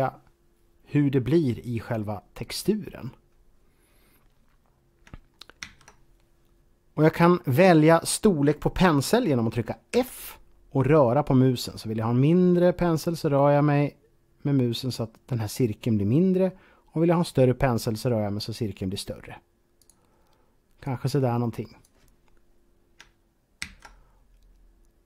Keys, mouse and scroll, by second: 4.7 click, 5.4 ctrl+z, 9.7 f, 19.6 f, 19.7 click, 20.7 click, 23.5 ctrl+z.